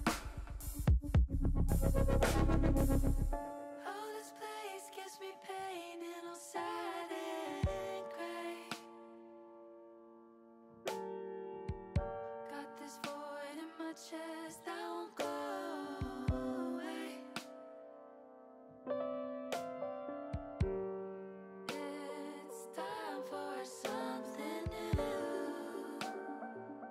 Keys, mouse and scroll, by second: 0.0 click, 0.6 click, 1.1-2.1 drag, 2.6 middle click, 4.6-6.5 middle drag, 6.9 click, 8.1 middle click, 10.4 click, 11.7 middle click, 12.5 middle click, 13.5 click, 14.4 ctrl+z, 15.5-16.8 drag, 18.4 middle click, 19.5 middle click, 21.1 middle click, 24.2 click, 24.9 ctrl+z, 25.6 click, 26.5 click.